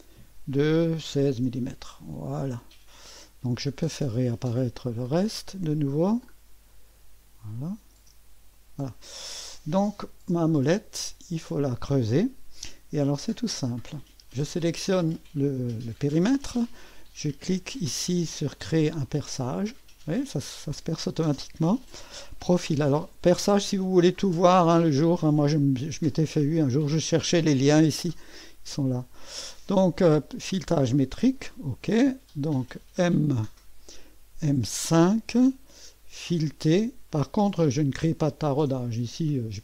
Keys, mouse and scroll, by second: 0.7-1.6 typing, 4.8 click, 5.1 space, 7.6 click, 8.0 space, 8.6 click, 14.0 click, 19.0 click, 19.7 click, 23.2-26.8 drag, 29.7 click, 30.3-31.7 drag, 32.2 click, 34.9 click, 36.4 click.